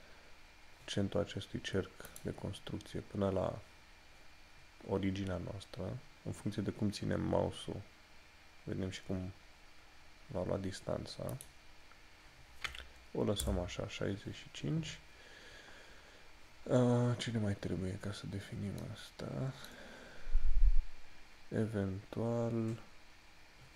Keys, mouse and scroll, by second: 2.2 click, 11.6 click, 18.0 scroll down 1, 18.9 middle click.